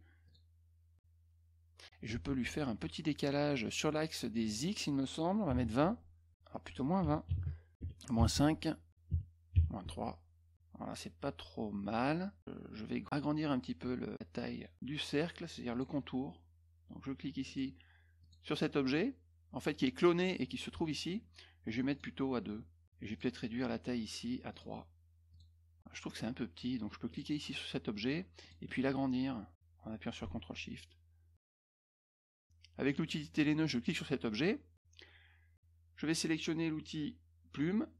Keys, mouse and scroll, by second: 0.2 click, 4.4 click, 5.7 Tab, 6.5 click, 8.3 Tab, 9.8 Tab, 15.7 click, 17.4 click, 18.2 click, 21.9 right click, 23.0 click, 24.5 right click, 25.3 click, 27.0 click, 28.4 click, 29.5-31.3 drag, 32.8 click, 33.8 click.